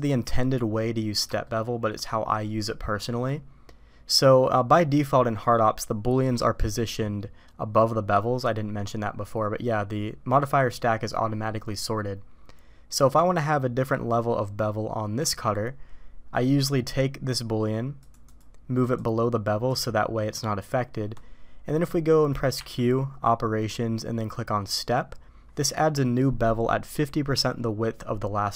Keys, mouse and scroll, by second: 1.4-1.9 shift+middle drag, 3.0 middle click, 17.9 click, 18.2 click, 18.9-19.7 drag, 22.5 q.